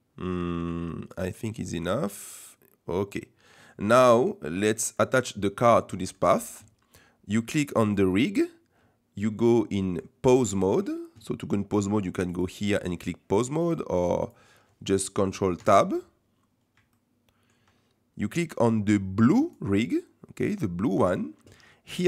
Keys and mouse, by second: 1.7-3.7 middle drag, 4.7 middle click, 5.8 middle click, 9.4 middle click, 12.3-13.2 drag, 13.6 click, 14.2 click, 15.6 ctrl+Tab, 16.9-17.4 shift+drag.